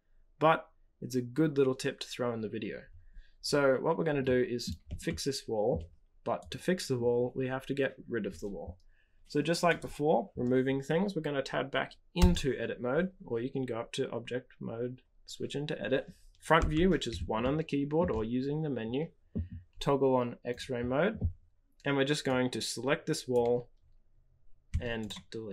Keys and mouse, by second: 4.2 middle click, 5.0-5.7 shift+middle drag, 6.3 click, 9.7 click, 16.5 KP_1, 17.4 shift+middle click, 20.5 click, 22.3-24.3 drag, 24.6 x.